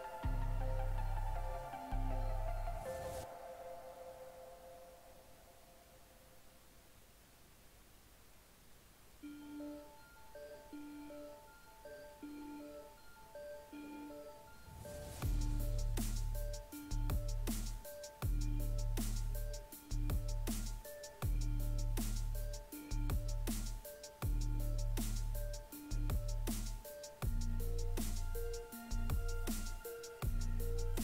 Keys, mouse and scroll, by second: 1.2 right click, 2.4 shift+right click, 5.0 right click, 7.9 right click, 11.2 right click, 12.0 right click, 14.3 right click, 15.9 right click, 16.7 right click, 17.6 ctrl+right click, 18.2 click, 19.5 ctrl+z, 20.9 click, 21.2 right click, 23.2 right click, 25.3 right click, 28.3 right click, 30.3 right click.